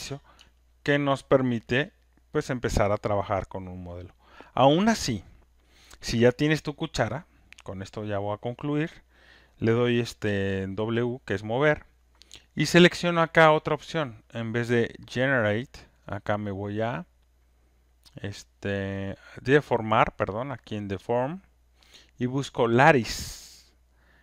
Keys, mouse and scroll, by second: 0.3 click, 1.4 alt+right click, 1.9 alt+click, 2.8 alt+right click, 3.2 alt+middle click, 4.3 alt+click, 7.7 click, 8.2 alt+scroll, 10.2 click, 15.4 click, 19.8 click.